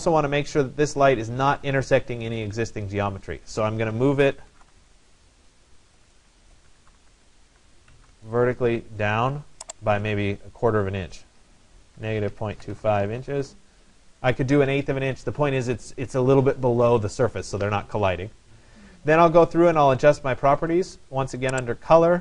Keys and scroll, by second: 5.5-7.4 typing, 12.0-13.3 typing, 12.4 Delete, 13.4 Return.